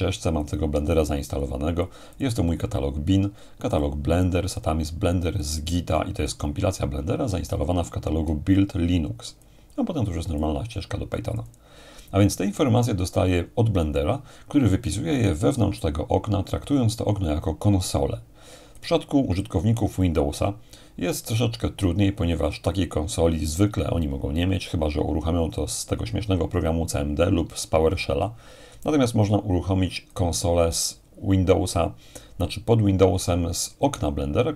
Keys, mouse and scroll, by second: 0.4-7.2 drag, 7.5-10.4 drag, 14.9-19.7 drag, 20.0-23.5 drag, 29.0-31.1 drag.